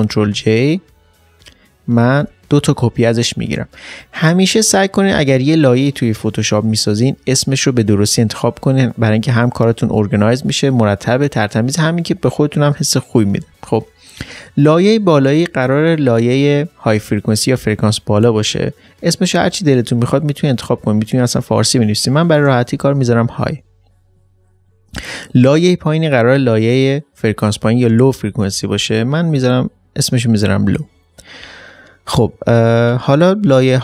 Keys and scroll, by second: 1.8 ctrl+j, 22.0 ctrl+j, 22.1-23.4 typing, 28.5-28.9 typing.